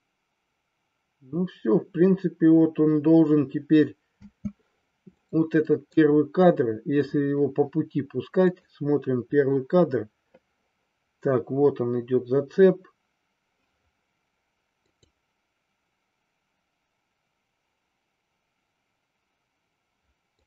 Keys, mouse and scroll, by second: 4.2 space, 5.3 middle click, 8.5 click, 14.8 click, 20.3-20.4 drag.